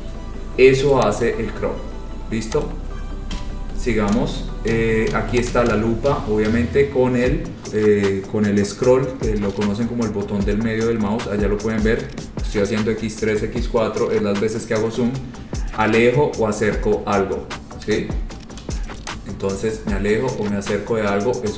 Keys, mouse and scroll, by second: 0.0 click, 0.3-1.4 scroll, 1.4 click, 2.8 click, 3.5 Delete, 5.6 click, 6.5-7.7 scroll, 8.3 scroll, 9.0-9.5 scroll, 9.9 scroll, 10.7-11.8 scroll, 12.2-12.7 scroll, 13.0-14.2 scroll, 14.8-16.9 scroll, 17.8 scroll, 19.2 click, 19.6-21.5 scroll.